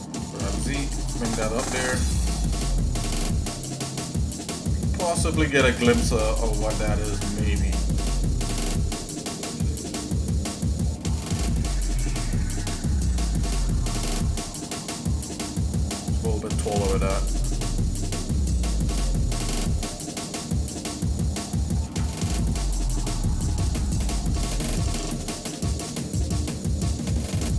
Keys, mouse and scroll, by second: 0.1 g, 2.4 shift+middle click, 3.3 middle click, 3.8 shift+middle click, 4.7 scroll down 2, 5.3 shift+middle click, 5.7 middle click, 6.3 middle click, 6.7-7.0 scroll down 2, 7.2 middle click, 7.8 middle click, 8.4 shift+middle click, 9.6 middle click, 10.1 shift+middle click, 11.2 shift+middle click, 12.2 middle click, 12.7 shift+middle click, 13.3 middle click, 13.8-14.7 scroll up 3, 14.9 middle click, 15.7 shift+middle click, 16.7 g, 18.3 shift+middle click, 19.3 scroll up 1, 19.6 alt+shift+click, 21.3 click, 21.8 ctrl+Tab, 22.9 click, 23.3 alt+shift+click, 23.8 alt+shift+click, 24.9 s.